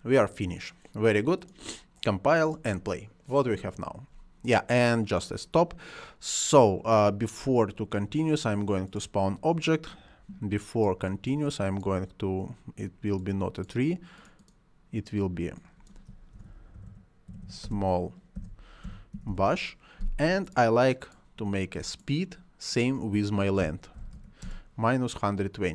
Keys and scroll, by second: 16.0-18.7 typing, 23.3-24.5 typing.